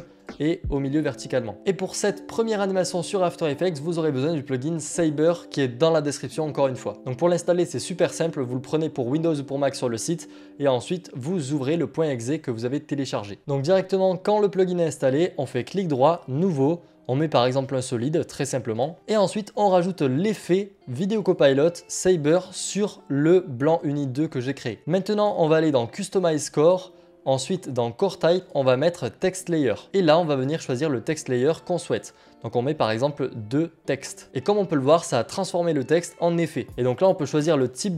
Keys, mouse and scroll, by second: 1.6 click, 8.0 click, 13.4 click, 14.8 Delete, 15.2 click, 17.9 click, 18.4 right click, 20.3 click, 23.0 click, 26.3 click, 31.1 click, 32.8 click, 34.2-34.7 scroll, 36.7 click.